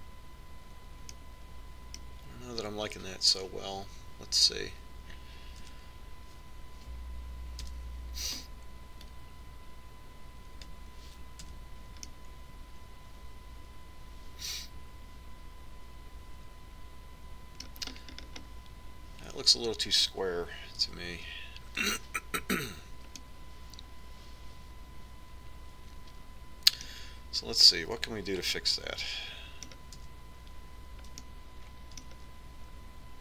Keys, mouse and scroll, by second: 2.2-4.1 middle drag, 6.8 Tab, 8.8 l, 10.3-11.8 drag, 12.6 Tab, 13.2-15.2 middle drag, 19.2-21.4 middle drag, 22.0 Tab, 24.4-26.2 middle drag, 29.6 Tab, 31.2 Tab.